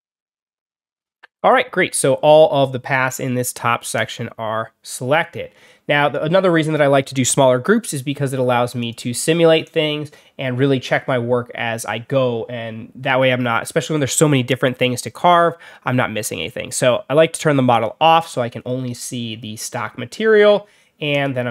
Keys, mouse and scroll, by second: 3.8 click, 8.7 click, 17.6 click, 21.0 click.